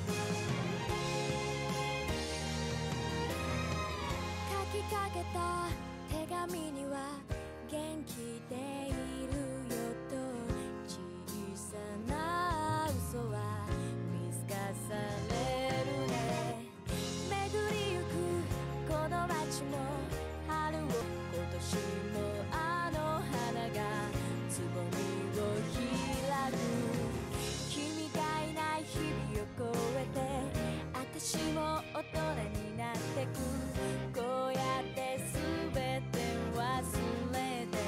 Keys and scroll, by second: 5.7 ctrl+z.